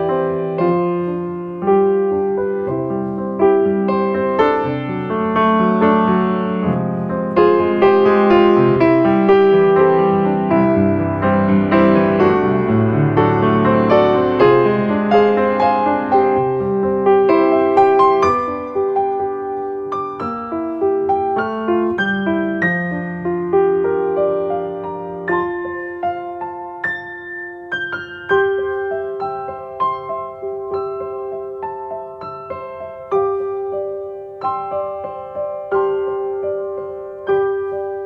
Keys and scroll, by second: 9.0 space, 27.4 ctrl+space, 37.5 space.